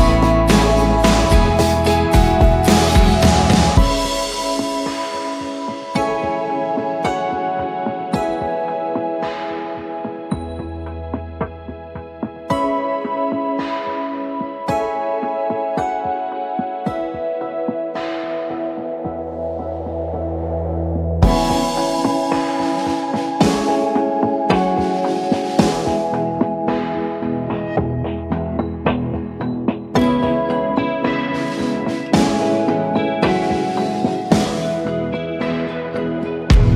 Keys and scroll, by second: 2.8 ctrl+g, 3.6-5.0 typing, 5.7 ctrl+a, 6.8 ctrl+d, 7.2 shift+Left, 7.3 shift+Left, 7.6 shift+Left, 7.8 shift+Left, 14.3-17.9 typing, 18.2 Return, 22.0-22.7 typing, 23.9 Return, 25.8 v, 30.1-34.0 typing, 34.7 Return.